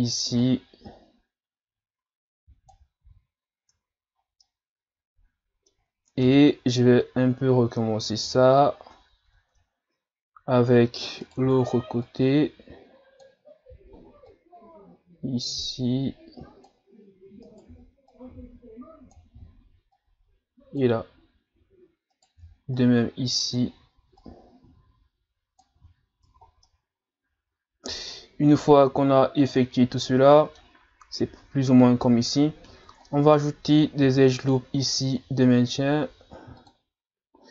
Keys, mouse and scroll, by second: 0.4 click, 3.0 z, 3.6 Tab, 4.2 scroll down 2, 4.4-6.2 middle drag, 6.2 KP_7, 8.3 z, 9.0 scroll up 1, 9.2 Tab, 9.7-10.0 ctrl+scroll up 2, 11.2 right click, 11.4 b, 14.3 click, 17.4 right click, 17.7 b, 19.9 click, 22.1 right click, 22.4 b, 24.2 click, 25.8 z, 26.3 Tab, 26.5 scroll down 2, 26.7-29.1 middle drag, 29.1-29.5 shift+scroll up 1, 29.5-32.6 middle drag, 32.7 Tab, 33.1 middle click, 34.0 ctrl+r.